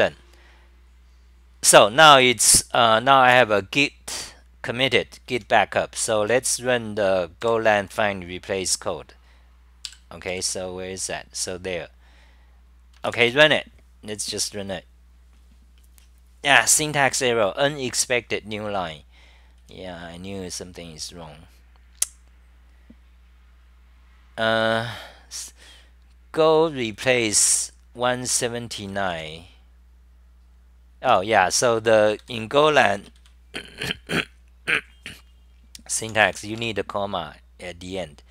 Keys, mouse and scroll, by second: 1.7 super+w, 3.3 super+w, 5.3 Home, 7.4 ctrl+Tab, 9.9 ctrl+shift+Tab, 10.4 ctrl+shift+Tab, 16.0 typing, 19.6 w, 24.5 w, 26.2-27.9 typing, 29.1 typing, 31.1 s, 32.3 3, 33.2 Delete, 36.0 u, 36.6 Home.